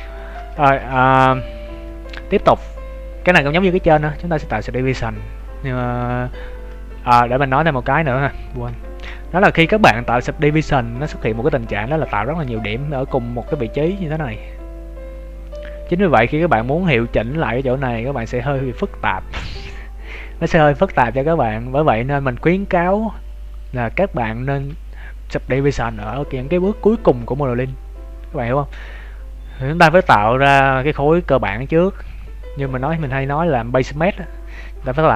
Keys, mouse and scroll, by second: 0.1 shift+middle click, 0.5 middle click, 1.3 right click, 1.6 shift+middle click, 7.2 shift+middle click, 8.0 right click, 8.6 Tab, 9.1 shift+middle click, 9.5 middle click, 11.1-12.0 scroll up 8, 12.2 right click, 12.6 middle click, 28.2-28.6 scroll down 7, 29.0 scroll down 3, 31.7 scroll down 1, 31.9 scroll down 1, 31.9 KP_3, 32.1 KP_1, 32.5 scroll down 1, 32.8 shift+middle click, 33.1 Tab.